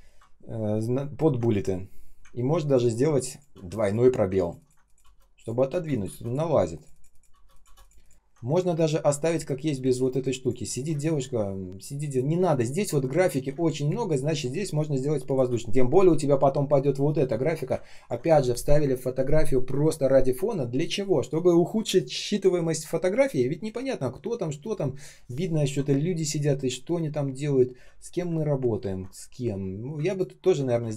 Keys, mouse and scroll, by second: 0.9 ctrl+scroll down 1, 2.2 ctrl+scroll up 1, 2.7 ctrl+click, 3.5 space, 4.3 ctrl+click, 4.5 ctrl+click, 4.9 space, 5.0 space, 5.6 space, 7.2 space, 7.6 space, 8.1-9.1 ctrl+scroll up 1, 9.7 space, 10.2 space, 11.3 space, 13.4 space, 13.9 space, 14.0 space, 17.8 ctrl+click, 25.9-26.4 ctrl+scroll up 1, 26.4 ctrl+scroll down 1, 27.2 ctrl+scroll up 1, 28.7-29.7 ctrl+scroll down 1, 30.0 ctrl+click, 30.3 ctrl+scroll down 1, 30.7 space.